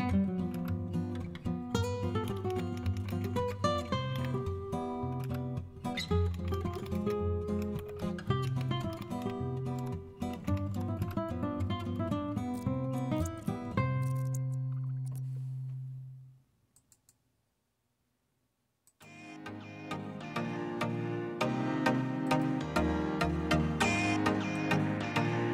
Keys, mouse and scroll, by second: 0.5 Return, 1.9-4.1 typing, 5.2 Return, 5.3-11.1 typing, 9.7 Tab, 12.3-15.0 typing, 15.1 Return.